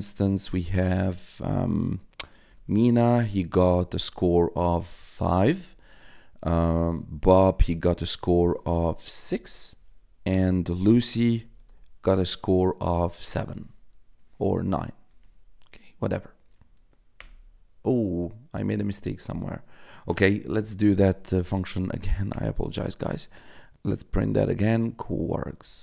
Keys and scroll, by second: 1.9-3.8 typing, 5.1 5, 5.6 ,, 7.0-8.0 typing, 9.2 6, 9.7 ,, 10.9 shift+l, 11.4 u, 11.9 =, 14.0 BackSpace, 14.6 9, 15.8 shift+9, 16.3 BackSpace, 16.6 shift+0, 17.1 Return, 20.4 Up, 22.2 Return, 23.1 Tab, 23.4 Up, 24.2 Left, 24.8 Left, 25.6 Left.